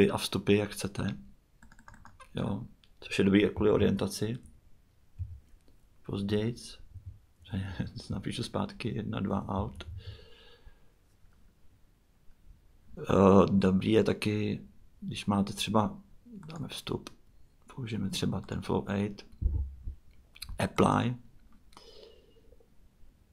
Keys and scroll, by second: 0.0-0.8 typing, 3.3-5.2 typing, 6.2-10.4 typing.